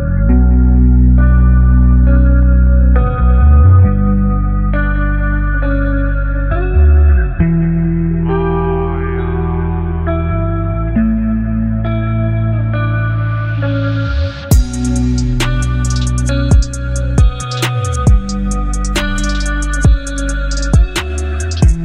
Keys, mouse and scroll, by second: 0.2 alt+scroll up 1, 1.4 space, 2.0 click, 2.2-2.6 space, 3.0 alt+scroll up 1, 5.1 space, 5.2-6.1 click, 5.6 space, 8.4-10.6 alt+right drag, 11.2-14.4 drag.